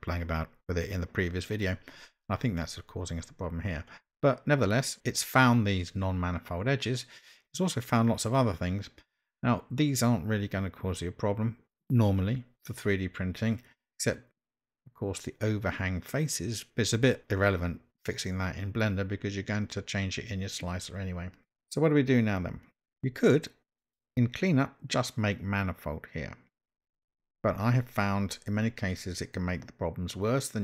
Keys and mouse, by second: 23.9 click.